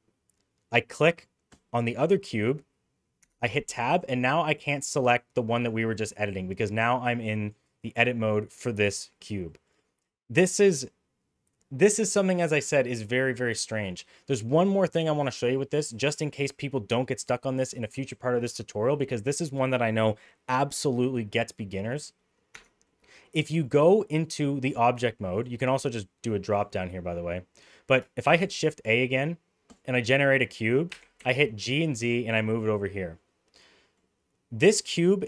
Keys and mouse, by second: 3.2 Tab, 4.1 click, 4.5 click, 4.9 click, 5.6 click, 6.8 click, 7.2 click, 7.6 click, 7.9 middle click, 8.6 middle click, 9.4 middle click, 15.5 middle click, 21.8 middle click, 22.5 Tab, 22.8 middle drag, 23.4 middle drag, 24.0 middle click, 25.4-26.5 drag, 26.9 middle click, 28.2 shift+a, 30.9 g, 33.2 middle click.